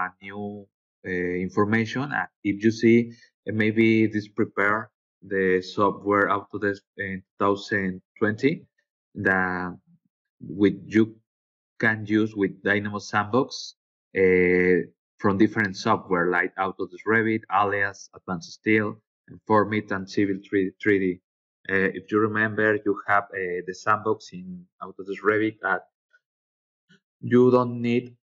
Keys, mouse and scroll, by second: 11.0 click, 12.6 click, 15.1 click, 20.4 scroll down 1, 25.5 click.